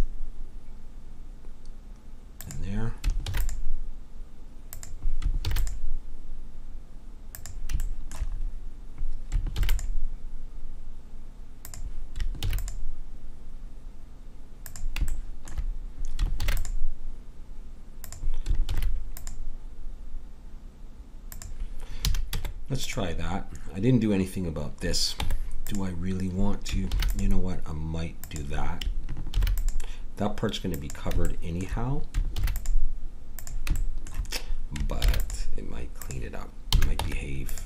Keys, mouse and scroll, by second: 3.2 ctrl+r, 5.4 ctrl+r, 7.9 click, 8.4 click, 9.5 ctrl+r, 12.4 ctrl+r, 16.4 ctrl+r, 18.7 ctrl+r, 22.1 a, 22.3 Tab, 25.1 Tab, 26.9 ctrl+r, 29.4 ctrl+r, 32.3 ctrl+r, 35.0 ctrl+r, 36.7 a, 37.0 Tab.